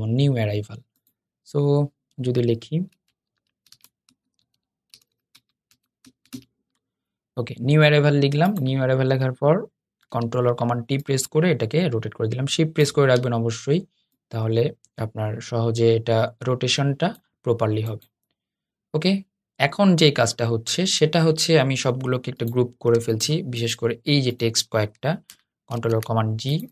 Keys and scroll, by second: 9.8 super+t, 25.4 shift+super+g.